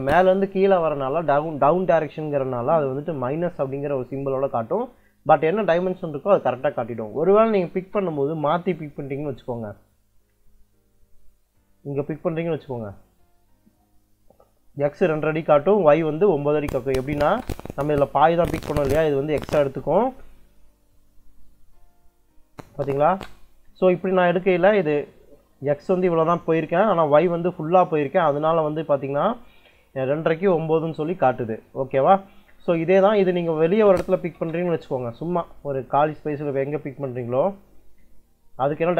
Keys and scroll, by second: 7.0 d, 7.3 i, 7.6 space, 17.1 space, 22.9 space, 33.3 d, 33.8 i, 34.2 space.